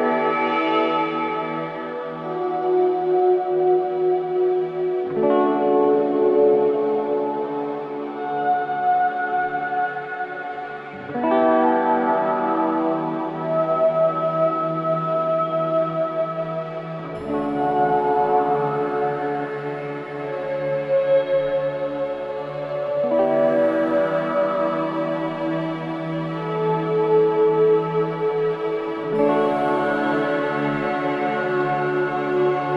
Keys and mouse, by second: 0.0 click, 2.4 click, 6.4 click, 9.0-11.2 drag, 12.3 click, 13.4 click, 15.2 click, 15.9 click, 16.7-19.3 drag, 21.1 click, 22.0 Return, 24.8-27.7 drag, 29.0-31.0 drag.